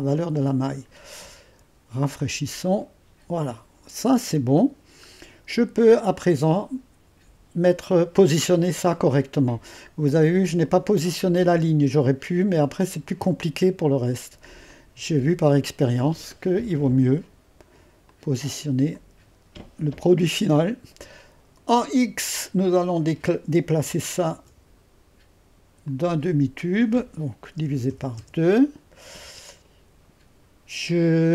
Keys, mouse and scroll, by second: 4.3-5.1 scroll up 1, 5.8-7.2 drag, 10.6-14.3 drag, 14.7-15.8 drag, 18.1-23.8 drag, 24.3 ctrl+v, 25.9-27.5 drag, 27.5-28.4 typing.